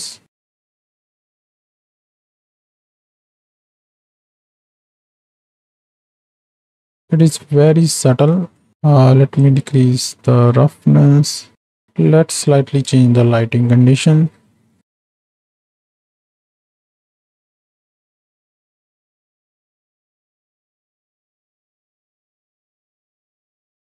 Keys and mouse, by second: 1.8-3.1 drag, 3.9-5.5 drag, 5.9 click, 7.4 middle click, 9.4-11.8 drag, 11.8 KP_0, 13.1 shift+middle click, 14.2 n, 15.0 click, 15.3 shift+middle click, 15.8-17.3 shift+drag, 17.5-18.5 drag, 18.9 n, 19.1 click, 20.7 middle click, 21.2 click, 21.8 click, 22.3 click, 22.6 middle click, 22.8 click, 23.8 middle click.